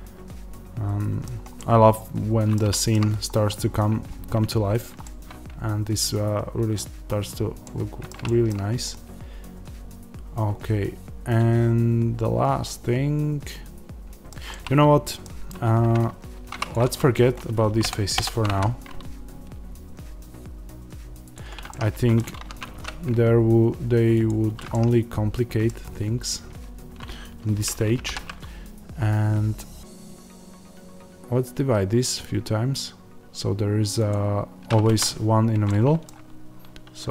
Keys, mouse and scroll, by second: 2.5 scroll down 1, 3.2-4.5 scroll up 1, 4.5-4.9 scroll down 1, 6.9-7.6 scroll up 1, 15.6 Tab, 16.6 click, 17.7 ctrl+KP_Add, 21.3 x, 21.6-37.1 middle drag, 22.3 ctrl+z, 24.2 x, 25.7-28.0 scroll down 1, 28.0 ctrl+r, 34.9 Escape.